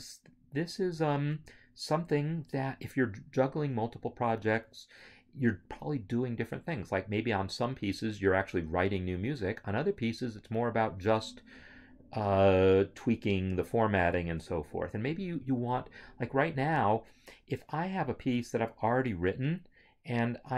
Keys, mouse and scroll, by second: 11.6 click.